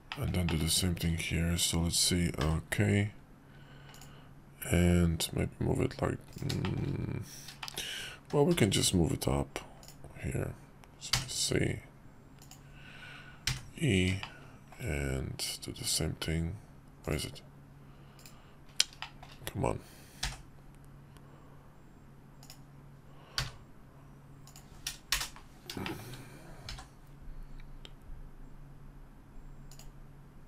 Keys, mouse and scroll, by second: 2.4 k, 6.6 shift+middle click, 7.6 shift+middle click, 8.5 k, 14.2-18.4 shift+middle drag, 19.0-20.2 shift+middle drag, 20.2 k, 25.8 shift+middle click, 26.7 k.